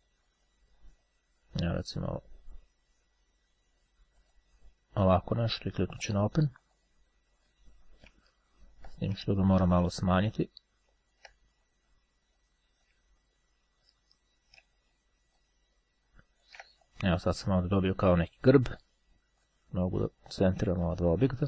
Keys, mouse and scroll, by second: 2.2 click, 3.6-5.0 drag, 6.1-7.4 drag, 8.4-9.0 ctrl+scroll down 2, 9.7-11.8 drag, 13.1 ctrl+click, 13.3-13.9 ctrl+scroll up 2, 13.9-14.4 ctrl+scroll up 1, 15.5-17.1 ctrl+shift+drag, 19.4 click, 20.9 shift+click.